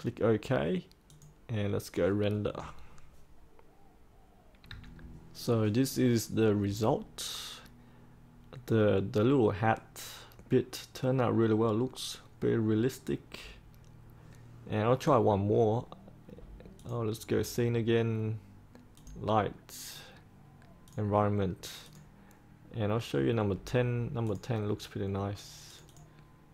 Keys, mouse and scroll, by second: 4.6 3, 16.7-20.0 drag.